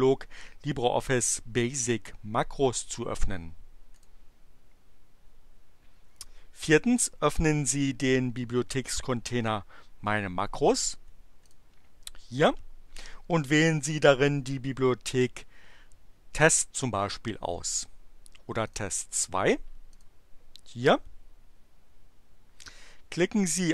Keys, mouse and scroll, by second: 4.0 click, 11.5 click, 18.5 click, 19.9 click.